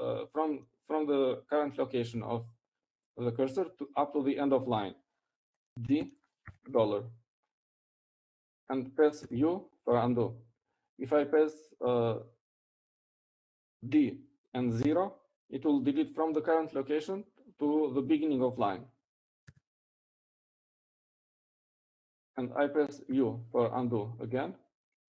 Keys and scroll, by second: 8.6 d, 9.6 shift+4, 12.0 u, 22.1 d, 23.0 0.